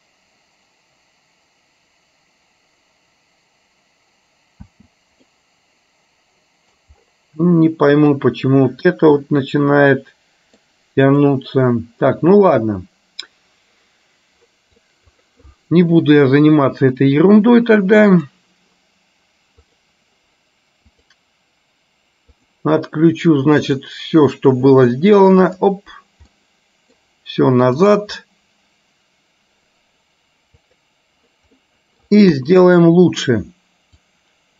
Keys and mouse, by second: 4.8 space, 5.5-6.8 middle drag, 8.0 click, 9.3-10.8 middle drag, 11.1 click, 15.1 click, 23.9 click, 25.6 click, 26.5 middle click, 28.0 click, 30.9 click, 31.6 middle click, 32.4 KP_3, 34.1-34.5 drag.